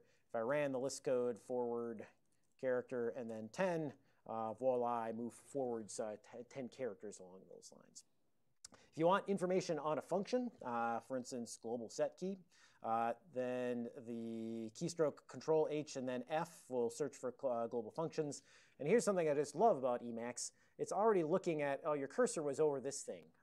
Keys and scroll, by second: 0.5 alt+:, 0.9-4.2 typing, 4.8 Return, 11.2 ctrl+n, 11.4 ctrl+n, 11.6 ctrl+n, 11.8 ctrl+n, 15.7 ctrl+h, 16.4 f.